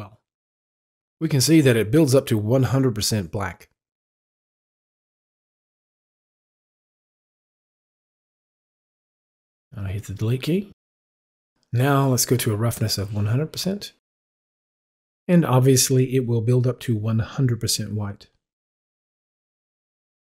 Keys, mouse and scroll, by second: 2.0-6.1 drag, 6.2 double click, 7.8 ctrl+z, 8.8 ctrl+z, 10.7 Delete, 12.0 click, 14.7-19.3 drag.